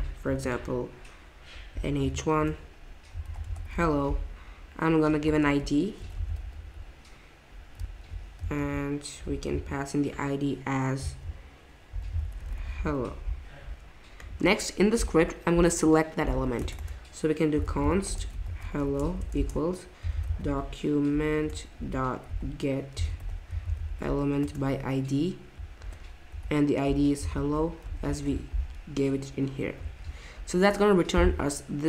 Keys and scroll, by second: 1.7 h, 2.0 1, 2.3 Return, 3.0-4.2 typing, 5.4-7.1 typing, 8.4 super+z, 11.6-12.9 typing, 13.0 Escape, 16.3-24.4 typing, 21.4 Return, 24.4 Return, 25.8-28.3 typing, 29.9 ctrl+Tab.